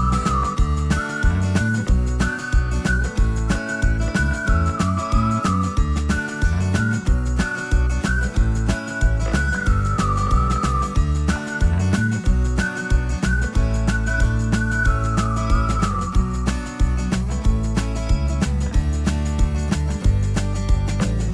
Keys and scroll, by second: 0.0-2.1 typing, 8.0 space, 16.8 c.